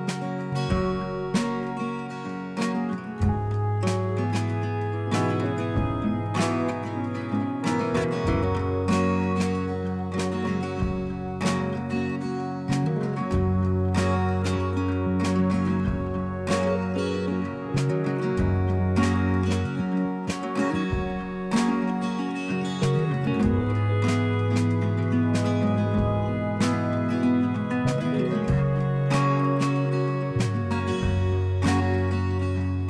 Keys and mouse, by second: 1.2 click, 1.9 right click, 6.0 click, 6.8 click, 8.1 click, 8.2 click, 10.4 click, 12.0 click, 13.5 click, 18.6 click, 21.3 ctrl+g, 22.2 click, 26.4 click, 28.4 click, 31.8 click, 31.8 click.